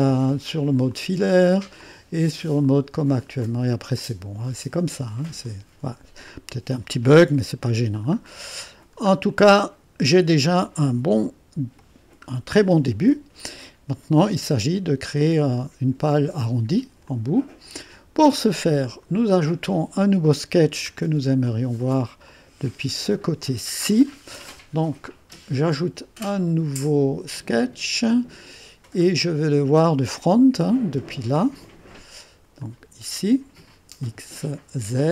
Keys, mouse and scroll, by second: 0.2 click, 1.0 click, 1.8 click, 2.7 click, 3.5 click, 4.0-5.4 drag, 6.3 click, 8.2-8.9 scroll up 1, 8.9-9.3 scroll down 1, 9.3-10.8 drag, 10.9-11.7 typing, 11.9-12.3 scroll down 1, 12.3-12.9 scroll up 1, 12.9-13.9 middle drag, 14.2 click, 14.2 middle click, 15.5 click, 15.7-16.4 typing, 17.1 click, 18.6 click, 20.9-21.5 scroll down 1, 21.5 click, 22.3-23.4 drag, 27.4 click, 29.0 middle click, 30.2 click, 32.6 click.